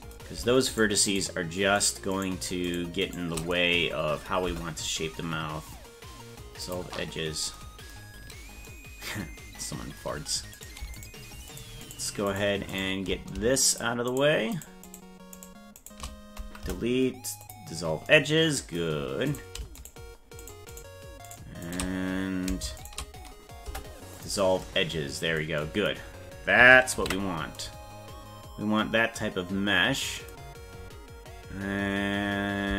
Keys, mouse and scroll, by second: 0.7 shift+right click, 1.9 shift+right click, 3.1 shift+right click, 4.5 Delete, 10.6 right click, 11.0 shift+right click, 11.6 shift+right click, 12.4 shift+right click, 12.8 shift+right click, 13.7 shift+right click, 14.6 shift+right click, 15.4 shift+right click, 15.8 shift+right click, 16.7 Delete, 19.3 right click, 20.8 shift+right click, 21.7 shift+right click, 22.8 shift+right click, 23.7 Delete, 27.4 ctrl+s.